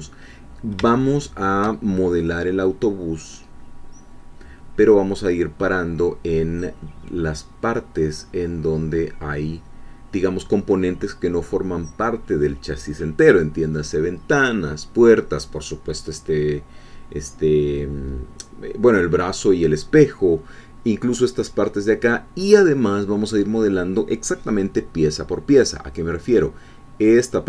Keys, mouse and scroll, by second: 0.3 scroll down 2, 1.0 shift+middle click.